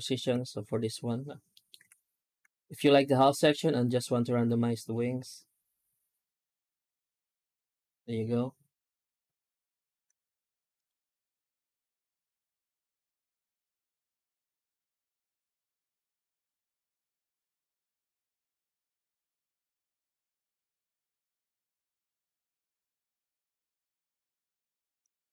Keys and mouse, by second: 1.4 middle click, 1.6 F9, 25.2-25.3 middle drag.